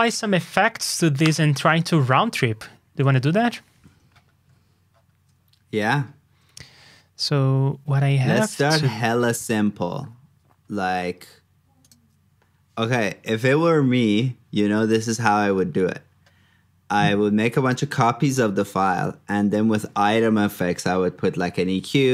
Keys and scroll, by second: 13.1 super+s.